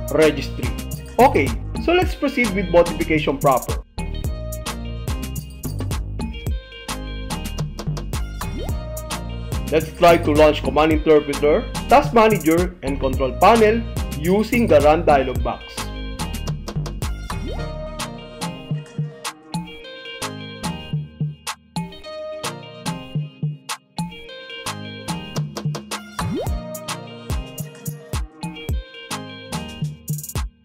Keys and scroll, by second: 16.1 super+r, 19.4 Return, 21.5 super+r, 26.4 Return.